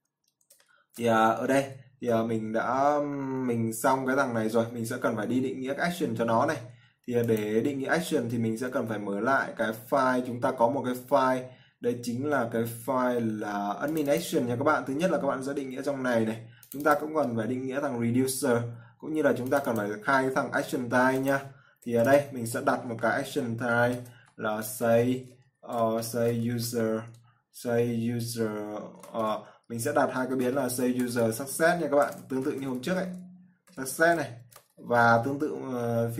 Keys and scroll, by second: 1.0 ctrl+s, 24.3-25.1 typing.